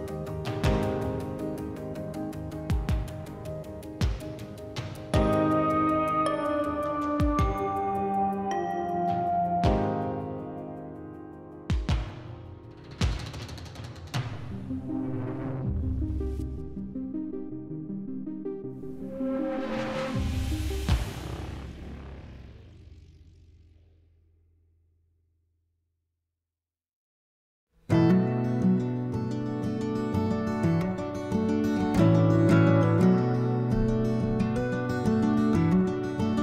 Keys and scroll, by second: 3.0 s, 18.6 3, 31.7 s.